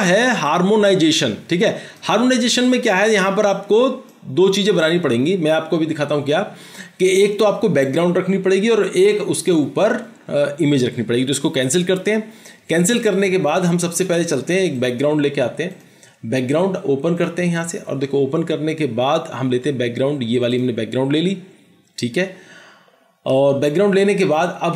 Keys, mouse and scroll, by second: 20.6 double click.